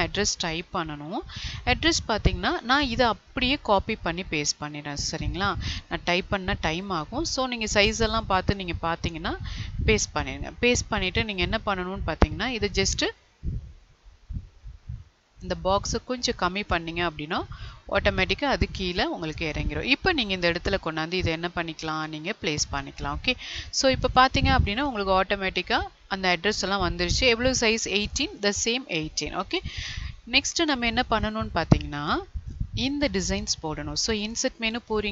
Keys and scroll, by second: 1.2 ctrl+a, 6.1 ctrl+c, 9.3 ctrl+v, 24.8 Left.